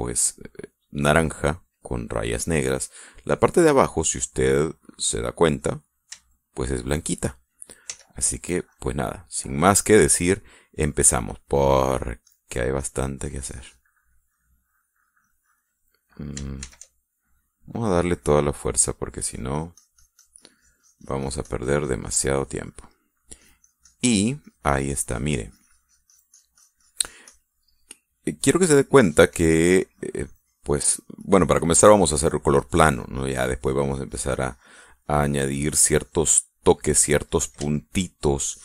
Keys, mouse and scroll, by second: 3.3-4.5 middle drag, 4.7-6.6 middle drag, 8.4 f, 9.1 click, 9.5 scroll up 1, 9.7-10.7 middle drag, 10.7 scroll up 1, 10.8 middle click, 11.4-11.8 scroll up 1, 11.8 click, 12.6 scroll up 1, 12.8-16.3 drag, 17.2 shift+f, 19.0 click, 21.2-23.4 drag, 23.5 middle click, 24.0-28.1 drag, 28.1-29.5 middle drag, 30.4-36.9 drag, 36.9 middle click, 37.4-37.8 scroll up 1, 37.8 middle click, 38.3 shift+middle click.